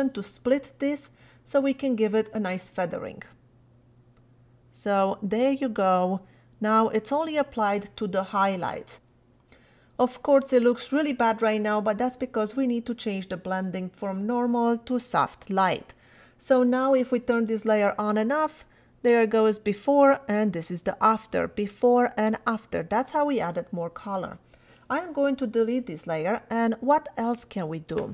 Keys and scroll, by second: 25.4 BackSpace.